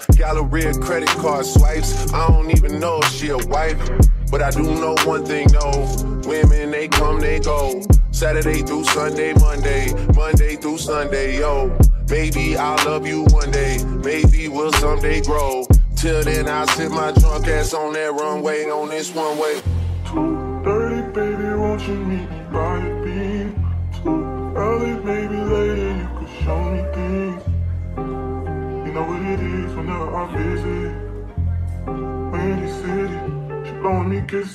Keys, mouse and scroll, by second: 0.1-2.0 middle drag, 2.0 a, 6.6-8.0 middle drag, 8.0 n, 9.8-12.2 right drag, 10.7 Tab, 12.2 l, 13.2 l, 15.8-18.7 typing, 20.8 l, 22.0 l, 23.3 click, 24.5 p, 28.2 1, 31.6-32.9 middle drag, 32.9-33.9 right drag, 33.9-34.5 drag.